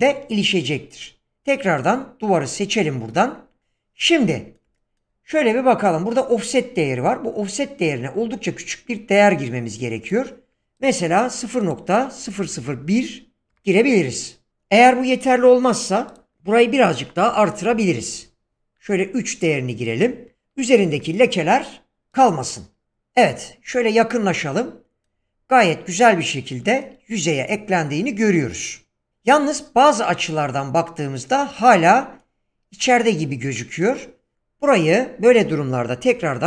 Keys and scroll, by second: 12.4 BackSpace, 13.5 1, 16.3 BackSpace, 17.3 2, 17.7 Return, 20.0 BackSpace, 20.9 3, 35.3 BackSpace, 36.0 5.